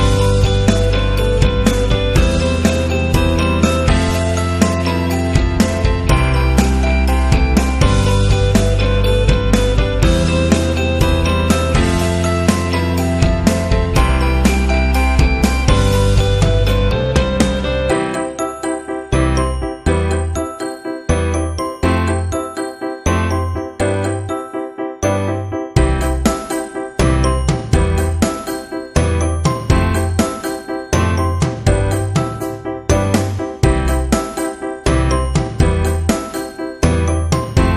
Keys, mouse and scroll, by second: 0.6 Down, 1.3 Down, 2.0 Right, 3.9 click, 4.8 click, 6.8 click, 7.9 click, 11.7 click, 14.4 click, 16.9 click, 17.8 click, 19.1 click, 19.8 click, 22.8 click, 24.7 ctrl+a, 25.6 click, 26.3 click, 26.7 click, 28.1 click, 28.5 click, 29.3-30.0 typing.